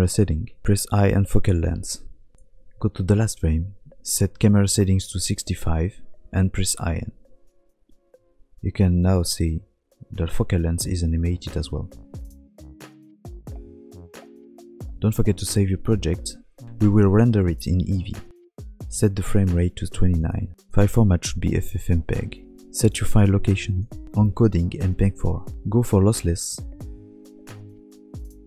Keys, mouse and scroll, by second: 16.6 click, 18.8 click, 20.5-20.8 scroll down 4, 20.8 click, 23.0-23.6 scroll down 3, 23.6 click, 23.9-24.6 scroll down 2, 24.6 click, 24.6 scroll down 3, 26.1 click, 28.3 click.